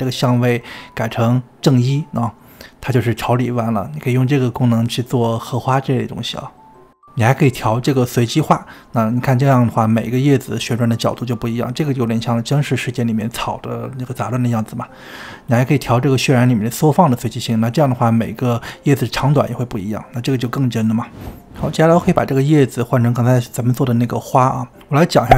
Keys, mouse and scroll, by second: 0.9-2.6 drag, 2.6-6.7 middle drag, 6.7-10.1 drag, 10.6-15.5 middle drag, 15.5-18.0 drag, 18.0-21.0 middle drag, 22.0 click, 22.2-25.3 middle drag.